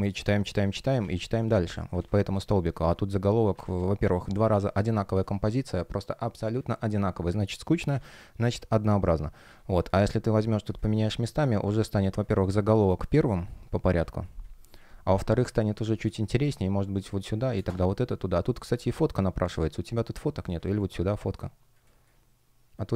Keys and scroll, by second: 1.1 super+z, 3.4 super+z, 4.0 space, 7.5 super+z, 15.0 space, 16.1 shift+p, 17.0 space, 18.8 shift+p, 19.5 space, 21.7 space.